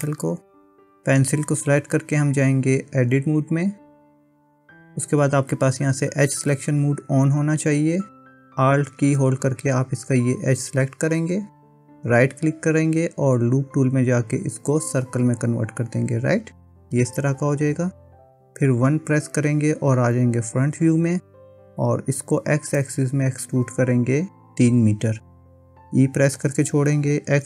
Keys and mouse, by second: 0.1 middle click, 3.0 Tab, 10.4 alt+click, 12.2-15.2 right drag, 19.0 KP_1, 22.7-24.1 drag, 26.6 e.